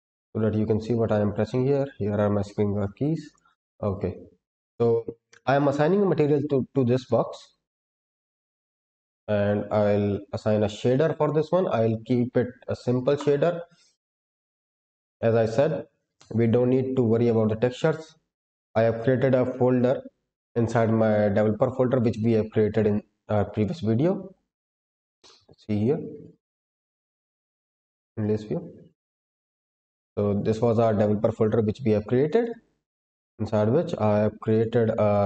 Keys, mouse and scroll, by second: 0.0 click, 3.2 click, 7.0 click, 7.7-8.7 scroll up 1, 8.7-10.6 scroll down 8, 10.6 scroll down 1, 11.1-13.2 drag, 13.8-14.1 scroll down 2, 15.0 click.